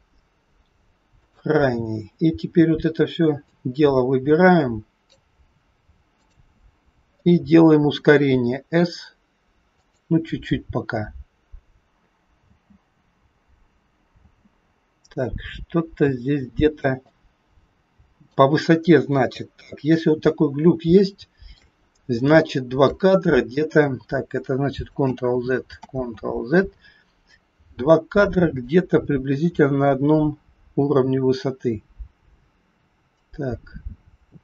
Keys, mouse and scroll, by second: 1.1 shift+click, 3.3 click, 6.2 click, 8.3 s, 12.4 space, 14.4 space, 15.4-15.9 scroll up 3, 17.2 click, 19.0 KP_3, 20.4-20.8 scroll down 1, 20.9 shift+middle click, 21.8 scroll up 2, 22.3 shift+middle click, 25.0 ctrl+z, 25.9 ctrl+z, 28.8 click.